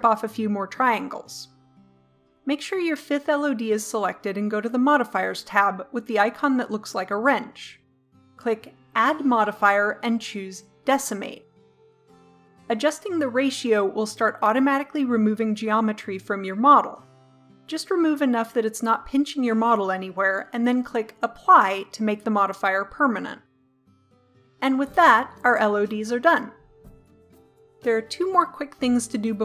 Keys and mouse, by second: 8.9-10.8 drag, 11.8-12.9 drag, 13.9-15.0 middle drag, 16.1-17.1 drag, 17.7-18.6 middle drag, 18.7-22.7 middle drag, 24.1-25.9 drag, 28.0-29.4 middle drag.